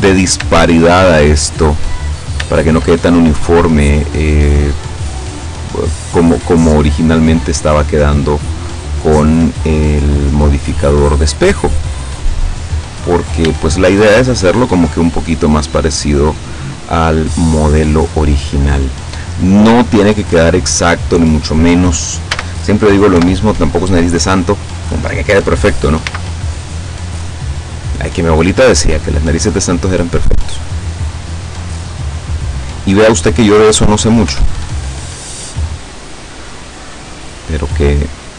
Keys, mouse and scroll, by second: 0.1 scroll up 2, 0.6 shift+middle click, 2.5 shift+right click, 3.3-4.7 drag, 6.1 right click, 7.0 right click, 7.9-9.2 drag, 9.7 right click, 10.3 click, 11.5 right click, 12.1-13.5 drag, 14.1 shift+scroll up 1, 14.6 shift+right click, 15.2-16.7 drag, 19.1-19.8 scroll down 2, 20.0 click, 22.4 a, 23.3 KP_7, 26.1 b, 26.9-28.9 drag, 29.9-33.9 drag, 34.3 o, 35.2 click, 35.9-36.2 scroll up 1, 36.2-37.6 scroll down 3, 37.9 scroll down 2.